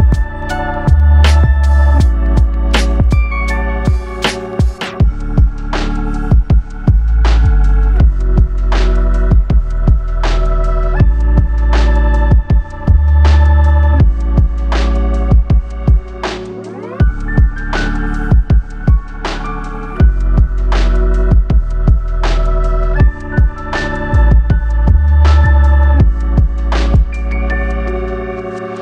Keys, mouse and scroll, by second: 3.6 f, 6.3-6.7 scroll up 2, 7.8 shift+middle click, 8.9-9.5 scroll up 1, 10.1 click, 12.1 click, 14.5 shift+click, 15.8 shift+click, 16.7 middle click, 18.6 shift+click, 19.8 ctrl+z, 20.0 ctrl+z, 20.3 ctrl+z, 20.4 ctrl+z, 21.6 ctrl+z, 23.6 click, 24.9 click, 27.2 ctrl+z.